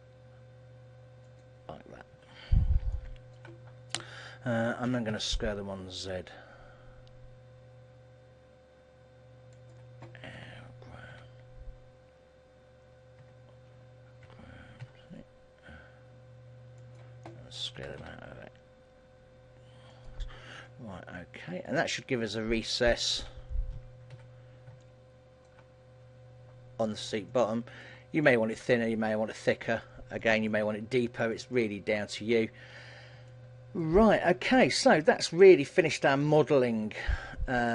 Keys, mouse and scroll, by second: 1.6 click, 2.3 KP_1, 3.0 shift+middle click, 6.8 s, 9.8 click, 10.6 g, 14.4 g, 17.0 click, 17.9 s, 20.2 click, 20.5 scroll down 2, 20.8 middle click, 23.3 alt+h, 23.8 Tab, 24.2 a, 24.9 shift+middle click, 27.0-27.4 scroll down 4, 27.4 middle click, 28.7 KP_1, 29.4-30.0 scroll up 1, 30.0 shift+middle click, 30.0 scroll up 4, 30.6 middle click, 32.0 middle click, 32.4-33.2 scroll down 4, 33.4 middle click, 34.2 shift+middle click, 34.8 middle click, 36.2-36.9 scroll down 4, 36.6 middle click.